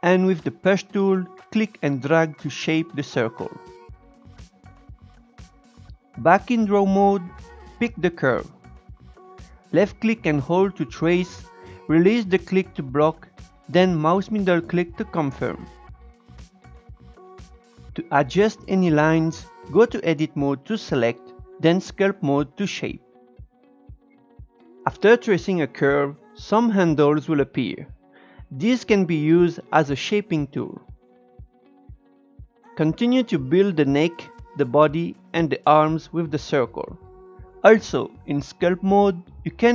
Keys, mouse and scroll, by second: 0.3-4.9 drag, 4.9 shift+middle click, 5.4 Tab, 7.0-8.3 shift+middle drag, 8.3 click, 9.0-10.2 scroll up 2, 10.2 click, 11.9-14.1 drag, 14.9-16.1 drag, 17.0-17.8 scroll up 1, 17.8 Tab, 18.8 click, 19.0 Tab, 19.7-23.8 drag, 23.8-24.3 scroll down 1, 24.3 Tab, 25.0 shift+middle click, 25.2-25.9 scroll up 3, 25.9 click, 28.0-29.6 drag, 30.1-31.7 drag, 31.8 scroll down 7, 31.9 scroll up 3, 32.0 shift+middle click, 32.4 scroll down 1, 32.5 Tab, 32.6 click, 33.4-33.9 scroll down 3, 33.5 shift+middle click, 34.0 Tab, 34.1 Tab, 34.2 click, 35.1 scroll up 2, 35.2 click, 35.6 shift+middle click, 35.7 Tab, 36.0 Tab, 36.1 Tab, 36.2-39.7 drag.